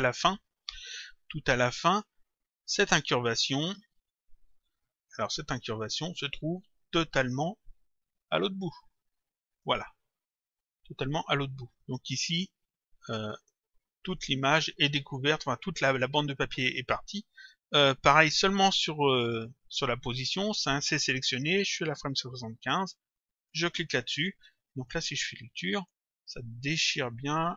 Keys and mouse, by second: 1.9 click, 3.2 click, 4.9 middle click, 6.5 click, 10.4 middle click, 11.6 middle click, 14.1 click, 23.4 click, 24.8 click.